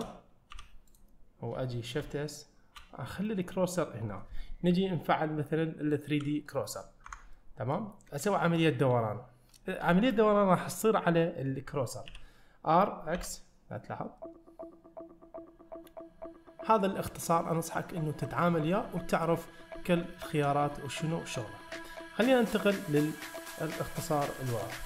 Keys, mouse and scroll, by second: 0.1 shift+middle click, 0.6 2, 0.9 click, 2.1 shift+s, 3.3 middle click, 7.1 Tab, 7.4-7.8 middle drag, 20.2-20.5 shift+middle drag, 20.8-21.1 middle drag, 21.6 shift+middle click.